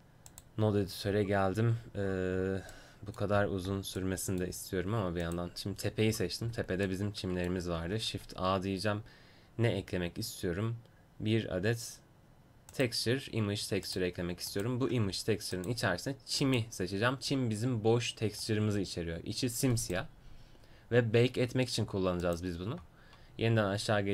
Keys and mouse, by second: 7.9 shift+a, 15.5-20.9 drag, 22.3-24.1 drag.